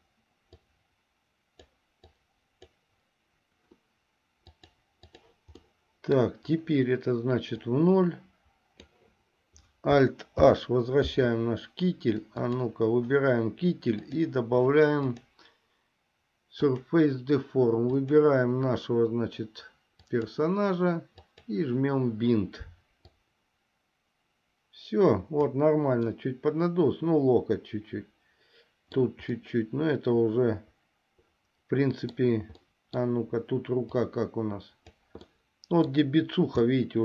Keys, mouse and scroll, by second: 0.8-2.0 drag, 2.3 click, 4.7 click, 5.8 middle click, 7.8-9.0 drag, 10.6 alt+h, 12.6 click, 15.2-17.1 drag, 18.2 click, 21.4 click, 23.3-25.7 drag, 26.5-29.2 middle drag, 29.6-32.5 middle drag, 32.8 middle click, 34.2 click, 35.6 middle click, 36.9 middle click.